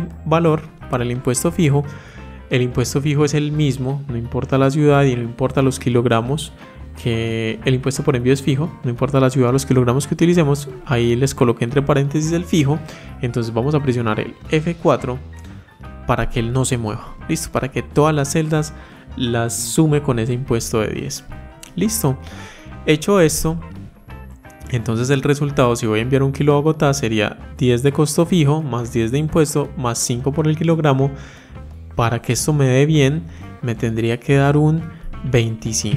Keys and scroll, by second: 14.4 F4.